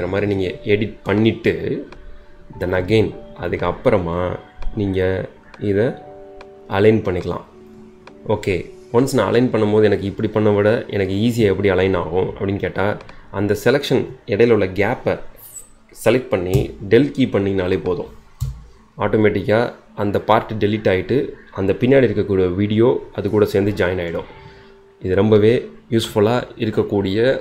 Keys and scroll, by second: 16.5 BackSpace, 18.4 BackSpace.